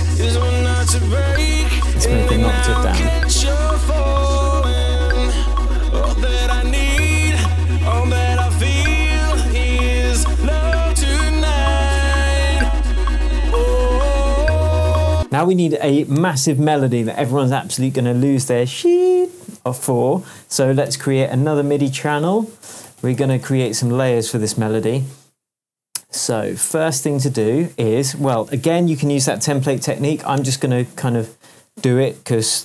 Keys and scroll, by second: 0.2 p, 0.7 shift+p, 1.5 shift+Down, 2.1 shift+Down, 3.1 shift+Tab, 10.6 super+d, 15.1 space, 16.3 super+s, 20.8 shift+super+t, 22.0 shift+super+r, 22.6 shift+super+r, 22.7-24.1 typing, 27.4 shift+super+m, 28.5 shift+super+Tab.